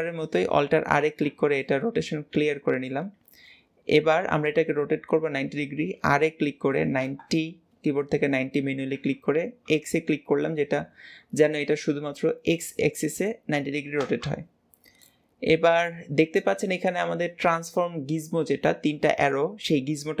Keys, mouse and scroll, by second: 0.9 alt+r, 1.5-4.6 middle drag, 5.7 r, 14.9-18.1 middle drag.